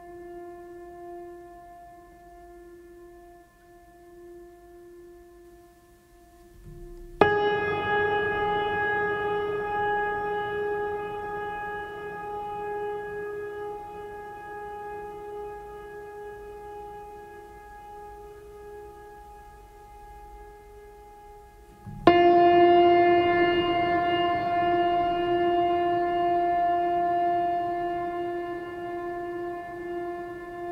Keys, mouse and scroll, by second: 1.5 right click, 2.3 right click, 6.0 right click, 6.6 right click, 7.2 right click, 7.8 right click, 14.5 right click, 14.8 right click, 21.5 right click, 21.8 right click, 22.0 right click.